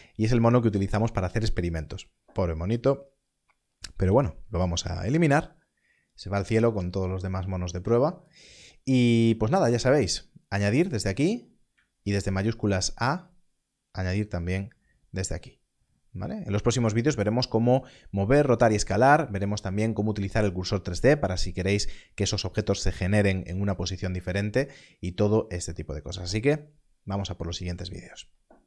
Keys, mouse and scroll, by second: 4.0 x, 4.8 click, 8.2 click, 11.6 click, 12.0 shift+a.